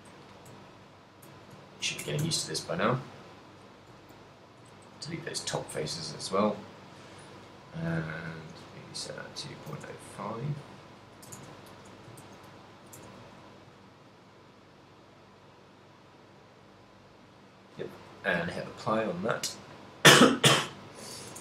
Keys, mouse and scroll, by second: 0.7 ctrl+middle click, 1.4 shift+middle click, 1.7 ctrl+middle click, 2.2 Tab, 2.5 ctrl+middle click, 2.8 middle click, 4.1 shift+right click, 4.5 right click, 4.7 x, 5.9 middle click, 6.5 ctrl+middle click, 8.4 click, 10.8 click, 12.3 ctrl+a, 13.2 Tab, 13.8 ctrl+a, 15.4 middle click, 16.5 middle click, 18.2 click, 19.1 z, 20.8 middle click.